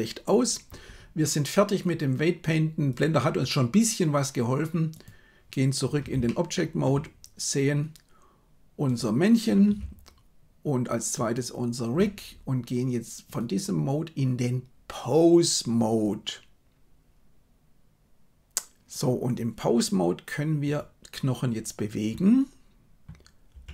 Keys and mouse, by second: 2.9-5.0 drag, 6.2-6.8 shift+middle drag, 11.2 shift+right click, 13.2-16.0 drag, 23.6 r.